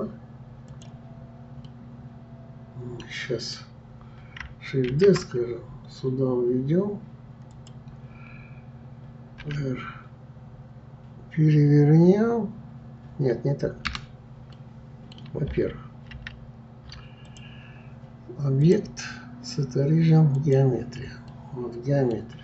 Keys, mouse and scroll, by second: 0.7 click, 1.6-4.7 middle drag, 4.9 shift+d, 14.5-16.2 middle drag, 16.2 ctrl+z, 17.2 click, 18.6-21.3 drag, 21.3-22.4 middle drag.